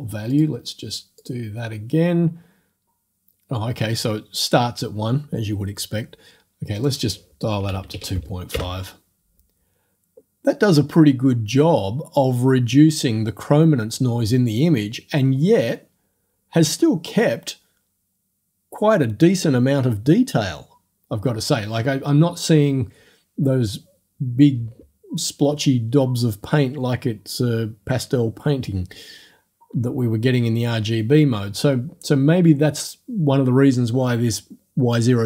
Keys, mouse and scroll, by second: 0.3 click, 1.2 click, 6.8 right click, 7.7 KP_2, 7.9 KP_5, 8.7 Return.